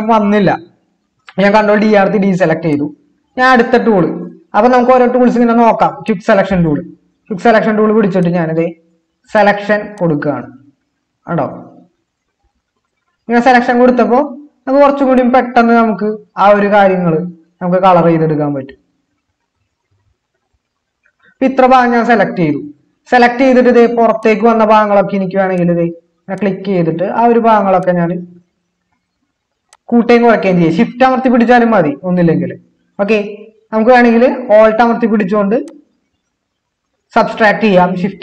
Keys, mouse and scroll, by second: 1.7 ctrl+d.